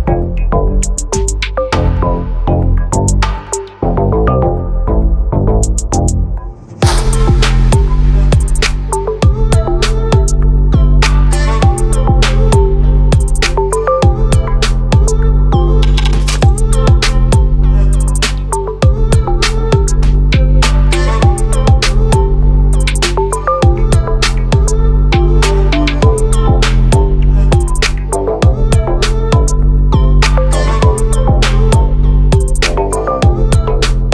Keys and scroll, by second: 8.5 ctrl+t, 26.5 ctrl+t, 32.5 ctrl+t.